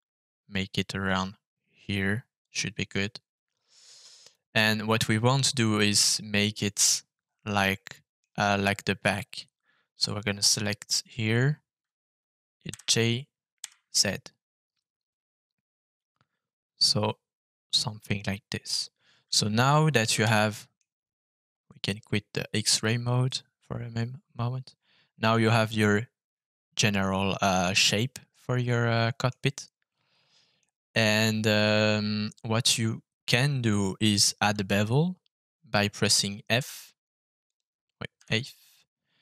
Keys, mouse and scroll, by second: 2.4 click, 2.8 middle click, 4.2 click, 6.8-8.1 middle drag, 10.0 middle click, 10.8 click, 12.6 g, 13.6 z, 17.6 click, 18.0-19.2 middle drag, 20.1 Tab, 20.5 middle click, 22.6 click, 23.2 middle click, 24.7-29.2 middle drag, 29.4-30.5 middle drag, 36.6 f, 38.1 f.